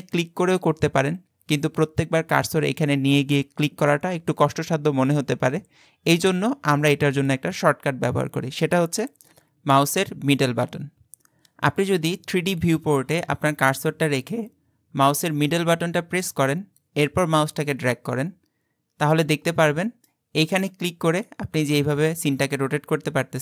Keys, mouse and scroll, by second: 0.0 click, 9.3 middle click, 15.7-18.7 middle drag, 20.8 click.